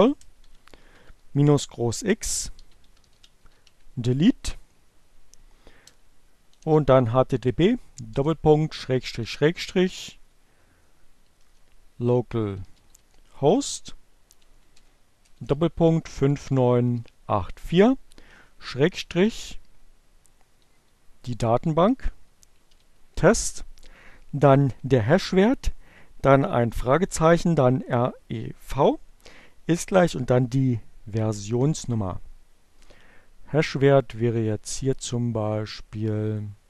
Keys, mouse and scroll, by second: 0.5 space, 0.9 -, 1.2 shift+x, 1.5 space, 2.8-4.2 typing, 5.4-6.9 typing, 8.2-16.7 typing, 18.2-19.4 typing, 35.0-36.6 drag.